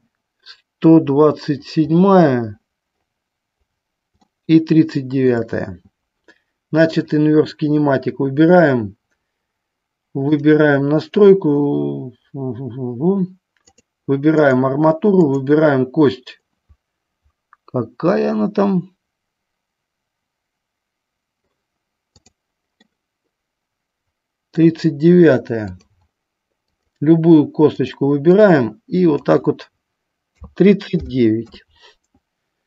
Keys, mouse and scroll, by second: 4.4-5.5 shift+middle drag, 7.1-9.7 drag, 10.5 click, 14.0 click, 15.4-22.5 drag, 23.0-24.8 middle drag, 25.8-27.1 drag, 28.1-32.6 drag.